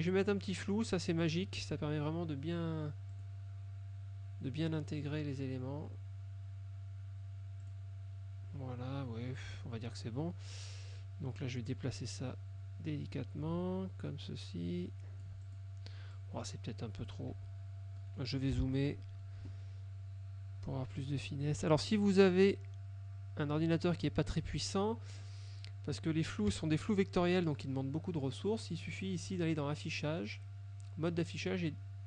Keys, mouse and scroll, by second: 1.3 click, 3.2 click, 4.9 middle click, 7.7 click, 9.6 F2, 10.1 click, 11.8-15.9 drag, 16.2 click, 17.4 Right, 18.1 middle click, 18.9 middle click, 22.3-23.9 drag, 26.6 KP_Subtract, 29.5 click.